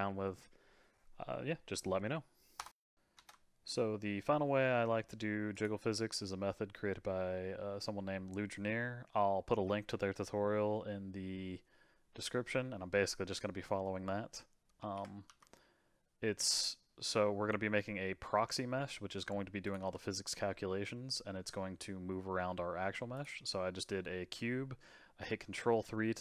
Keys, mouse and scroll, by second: 3.1 shift+a, 14.8 ctrl+3, 15.2 g, 17.6-19.2 middle drag, 19.2 s, 19.8 g, 23.4-26.2 middle drag.